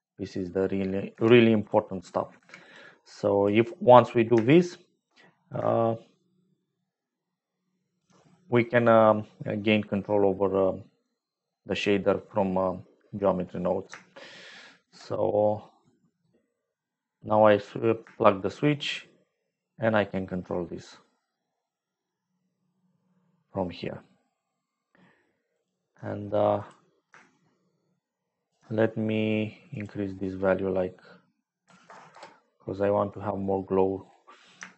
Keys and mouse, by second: 1.0 g, 2.3 g, 3.0 click, 5.7-8.1 shift+drag, 10.8 click, 10.8 right click, 13.3 click, 13.3 right click, 14.3 shift+click, 15.8 click, 18.4-21.1 shift+drag, 24.3-25.4 shift+drag, 25.6-26.7 shift+drag, 27.3-28.3 shift+drag, 28.3 shift+middle click, 29.7-32.0 drag, 32.0 middle click, 32.5 click, 33.4 click, 33.4 right click.